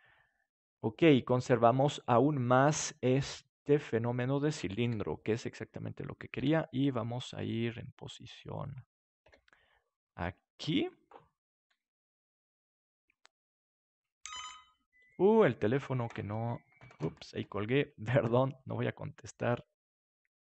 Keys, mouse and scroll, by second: 0.6-1.7 middle drag, 4.2 middle click, 4.8 KP_7, 5.1 middle click, 6.3 r, 8.6-10.3 drag, 9.2 g, 10.8-12.7 drag, 11.6 s, 13.0-14.7 drag, 14.3 r, 15.1-17.5 drag.